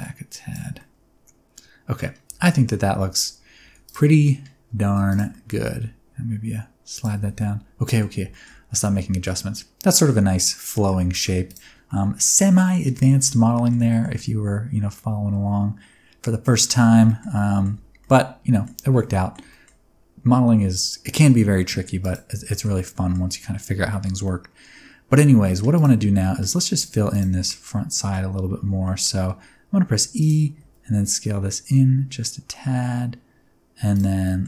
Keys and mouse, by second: 0.7-2.0 middle drag, 2.3 Tab, 2.4 middle click, 3.1 alt+z, 3.6 alt+z, 3.8 click, 4.1 middle click, 4.8 1, 5.1 click, 5.3 middle click, 5.5 g, 5.7 g, 6.9 click, 7.1 Tab, 7.3-8.0 middle drag, 8.3 shift+middle click, 8.8 middle click, 10.5 middle click, 11.1 shift+middle click, 11.8-12.7 middle drag, 12.9 Tab, 13.2 middle click, 13.9 middle click, 14.1-16.4 middle drag, 16.5 middle click, 17.0 shift+middle click, 17.3 middle click, 17.7 Tab, 18.0 middle click, 18.8 alt+a, 19.0-19.3 middle drag, 19.5 shift+middle click, 22.0 click, 22.6 shift+middle click, 22.8 middle drag, 23.9 shift+middle click, 24.2-25.4 middle drag, 25.7 click, 26.0 Tab, 26.2 middle click, 26.7 1, 27.1 alt+click, 27.4 middle click, 28.8 middle click, 30.2 e, 30.6 s, 33.9 click.